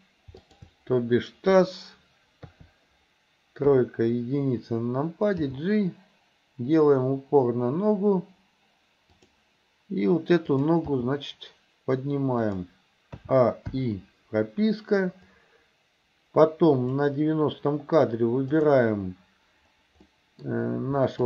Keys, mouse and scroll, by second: 0.4 shift+click, 2.5 KP_3, 3.7 KP_1, 5.4 g, 11.0 g, 13.3 a, 13.8 i, 15.4-17.1 drag, 18.6 click, 20.1 middle click.